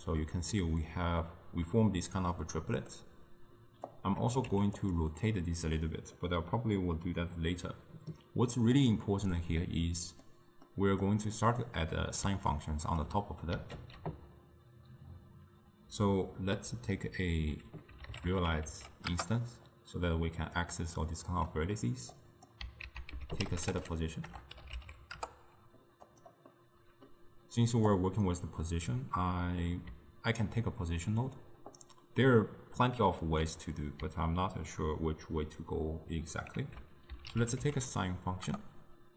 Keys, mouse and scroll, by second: 4.0 click, 4.6 g, 6.2-8.8 middle drag, 8.8 click, 9.4 click, 10.3 middle click, 11.1 click, 12.6-13.9 ctrl+middle drag, 13.9 ctrl+a, 21.6 middle click, 22.2 click, 22.9 ctrl+a, 26.6-27.9 middle drag, 27.9-31.0 drag, 33.3 click, 36.6 ctrl+a.